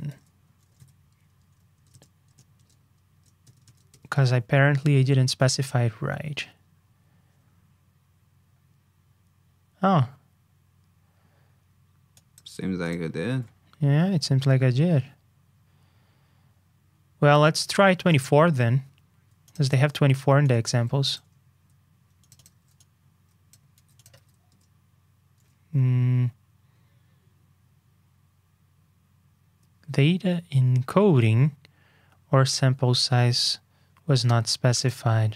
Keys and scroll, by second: 0.0 super+f, 18.0 super+Tab, 23.7 super+c, 24.1 super+v.